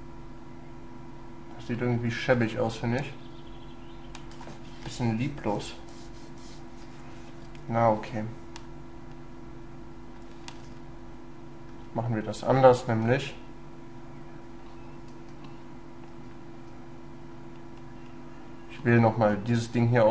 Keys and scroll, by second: 7.5 ctrl+z, 10.6 ctrl+y, 13.1 ctrl+y.